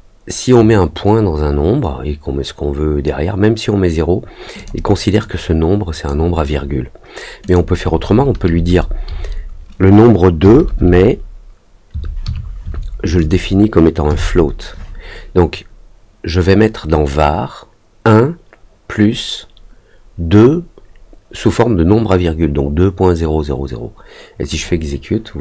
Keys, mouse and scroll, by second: 4.5 click, 5.1 click, 7.4 click, 24.5 click.